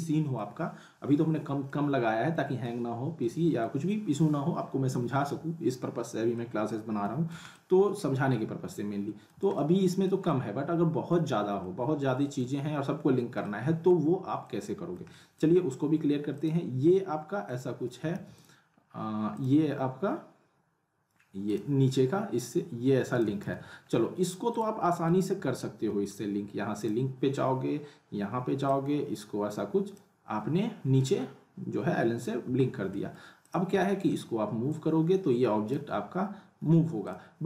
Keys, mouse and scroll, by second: 0.6-0.9 scroll up 1, 1.7-2.9 alt+middle drag, 7.8-10.2 alt+middle drag, 12.6 scroll up 1, 13.4-14.0 alt+middle click, 14.0 scroll up 1, 14.4-15.1 middle click, 16.3 click, 18.1 ctrl+z, 18.3 click, 18.7-19.0 scroll up 1, 19.3 click, 23.4 z, 23.8-24.5 scroll up 1, 24.5 click, 24.9 middle click, 25.4 scroll up 1, 25.6-26.2 alt+middle click, 26.8-30.2 drag, 32.0 scroll down 1, 32.4 w, 32.9 middle click, 33.4 click, 33.8 alt+middle click, 34.7-35.9 drag, 36.6 ctrl+z, 37.0 click.